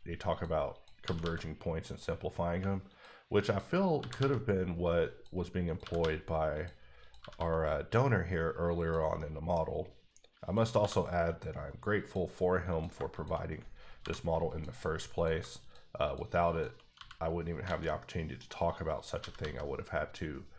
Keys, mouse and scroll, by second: 0.7 click, 1.0 g, 1.2 g, 1.8 click, 3.4 double click, 3.9 g, 4.1 g, 5.1 click, 5.6 click, 5.8 g, 6.0 g, 6.5 click, 7.0 click, 7.2 g, 7.3 g, 8.8 click, 9.1 middle click, 10.4 click, 10.8 f, 11.9 click, 12.7 click, 13.1 shift+click, 14.0 m, 14.4 click, 15.3 shift+click, 16.0 shift+double click, 16.4 shift+click, 16.9 f, 17.6 alt+a, 18.0 middle click, 18.9 click, 19.1 g, 19.3 g.